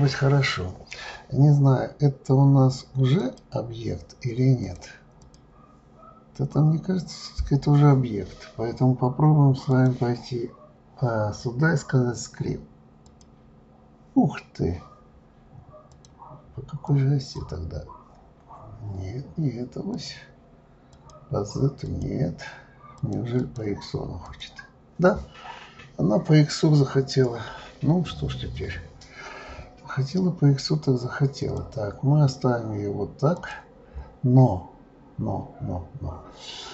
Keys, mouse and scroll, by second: 3.2 click, 4.6-7.6 drag, 9.7-12.7 drag, 15.9-18.3 drag, 18.3-18.7 scroll down 4, 19.9-23.1 drag, 23.4-26.4 drag, 26.7-28.2 scroll up 5, 31.4 click, 32.4-32.7 scroll down 3, 33.4 click.